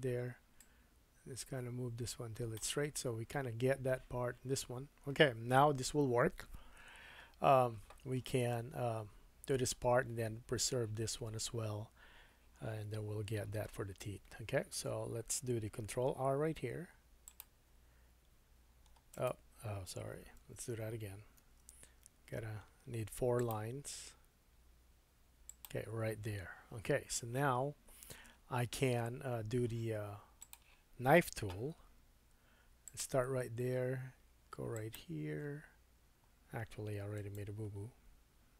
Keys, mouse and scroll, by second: 0.6-15.5 drag, 16.6 ctrl+r, 20.4 super+z, 21.4 ctrl+r, 25.6-30.4 middle drag, 30.4-31.7 drag, 31.7 k.